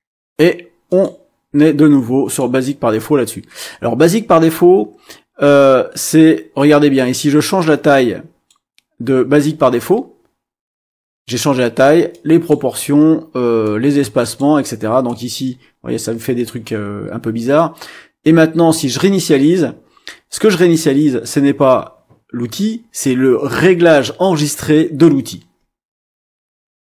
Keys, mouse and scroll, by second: 0.9 click, 2.2 click, 7.1-8.6 drag, 12.1 click, 13.6 click, 15.0-16.6 drag, 19.0 click.